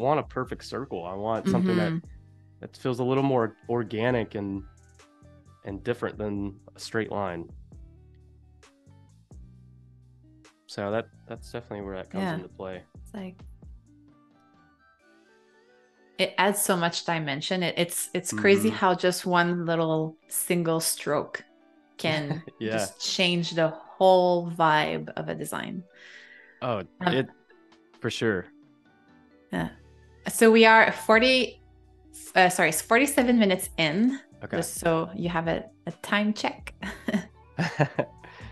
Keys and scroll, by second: 1.2 super+z, 11.9 super+-, 12.9 space, 15.2 a, 16.2 Delete, 17.1 space, 22.3 space.